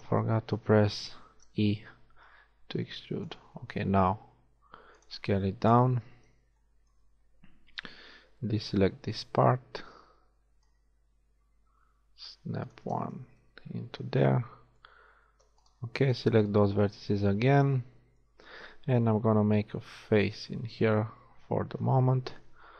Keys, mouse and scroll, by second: 1.1 ctrl+z, 2.4 e, 3.7 s, 5.7 KP_1, 8.3 b, 10.7 click, 13.4-15.6 middle drag, 15.6-17.6 right drag, 17.0 middle click, 19.9 f, 21.1 KP_1.